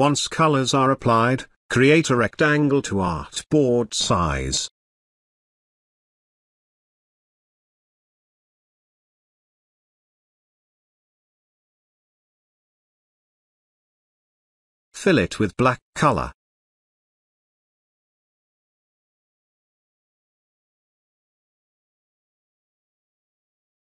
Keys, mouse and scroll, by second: 3.5 d, 7.0 click, 11.7-13.8 drag, 20.4 right click.